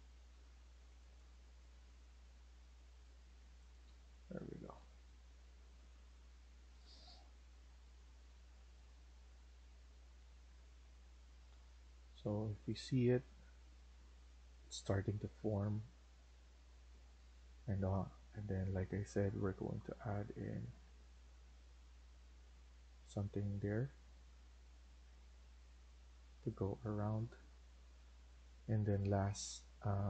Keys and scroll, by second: 3.7 Escape, 4.0 Escape, 4.7 Escape, 4.9 Escape, 7.6 Escape, 10.3 Escape, 11.5 Escape.